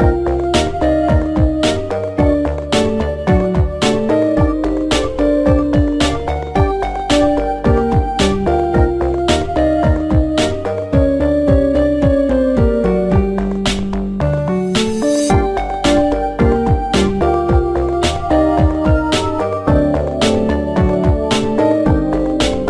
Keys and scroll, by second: 0.5 m, 0.7 BackSpace, 0.9 Return, 14.3 m, 14.6 Return.